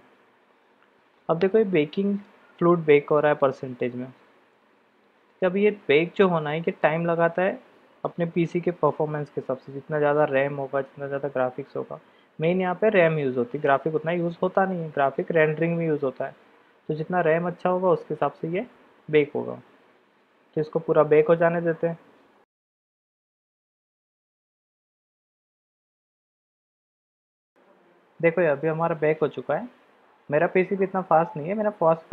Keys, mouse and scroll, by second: 27.4 click.